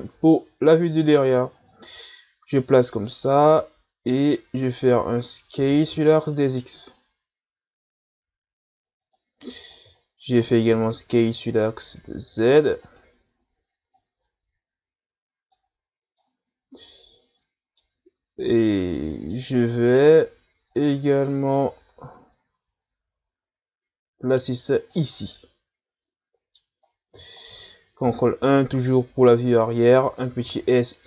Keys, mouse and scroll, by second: 0.4-0.8 scroll up 2, 1.7-5.6 drag, 5.6 s, 10.1-10.7 shift+scroll down 1, 10.7 s, 13.9-16.2 drag, 16.2-19.7 middle drag, 19.7-20.7 ctrl+scroll up 3, 20.8-23.8 drag, 25.2-26.8 middle drag, 26.8-27.4 scroll down 1, 28.1 ctrl+KP_1, 28.9-29.2 shift+scroll down 2, 29.2-30.0 scroll up 1, 30.2 s.